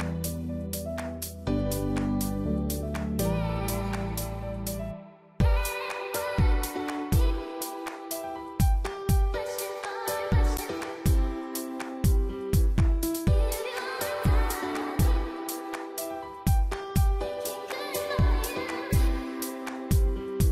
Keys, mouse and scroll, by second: 0.1 shift+click, 0.2 shift+click, 0.5 click, 1.0 click, 1.4 click, 1.5 shift+click, 1.9 shift+click, 2.2 shift+click, 2.8 shift+click, 3.1 middle click, 3.6 s, 4.3 middle click, 4.7-5.5 scroll up 6, 5.0 middle click, 5.5 click, 5.7 scroll up 1, 5.9 middle click, 5.9 scroll down 5, 6.2 middle click, 6.6 middle click, 7.3 middle click, 8.4 click, 9.8 click, 10.0 middle click, 10.7 e, 12.0 middle click, 16.0 middle click, 16.6-17.0 scroll up 3, 17.0 click, 17.6 alt+click, 18.1 alt+shift+click, 18.4 middle click, 18.9 alt+shift+click, 19.2 middle click, 19.6 alt+shift+click, 19.9 middle click.